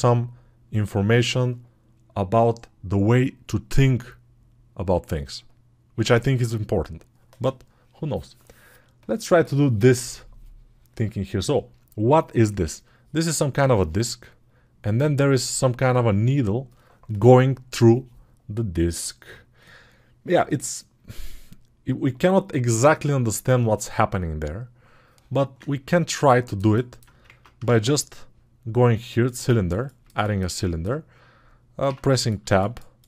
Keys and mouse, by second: 27.3 ctrl+Tab, 27.5 shift+a.